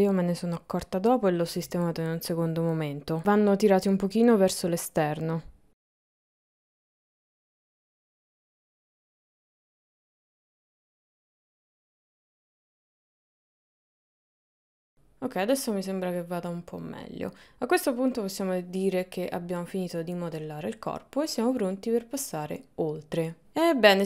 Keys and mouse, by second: 7.2 click, 7.6 g, 8.0 click, 8.1 g, 9.3 middle click, 10.0 g, 10.3 middle click, 10.6 Tab, 10.7 middle click, 10.8 Tab, 11.0 middle click, 11.3 click, 11.9 click, 12.5 click, 12.7 click, 12.9 click, 13.5 click, 13.8 middle click, 14.1 KP_1, 14.3 KP_3, 14.8 Tab, 14.9-17.5 middle drag, 19.0 middle click, 19.9 middle click, 20.7 middle click, 21.6 middle click, 22.1 middle click.